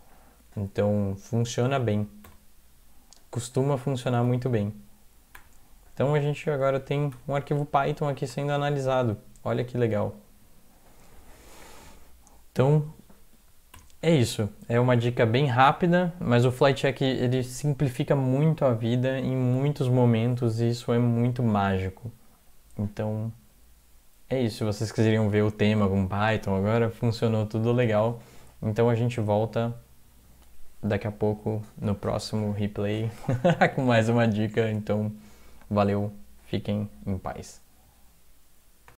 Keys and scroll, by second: 1.4 Right, 2.3 -, 4.3 ctrl+-, 5.4 ctrl+-, 7.1 ctrl+\, 9.5 Up, 10.0 Down, 10.2 Down, 10.4 Down, 13.8 alt+0.